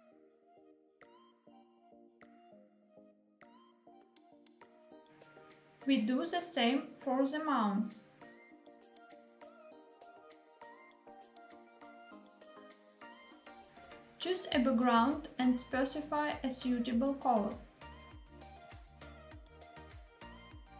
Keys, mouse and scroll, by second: 5.0 click, 6.9 click, 7.7 click, 9.3 click, 13.6 click, 16.9 click, 18.0 click, 19.2 click.